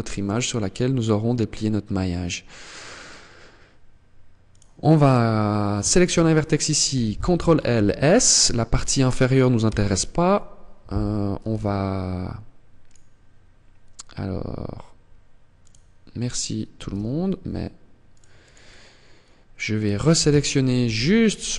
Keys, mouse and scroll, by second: 17.9 click, 19.1 right click, 20.2 ctrl+l.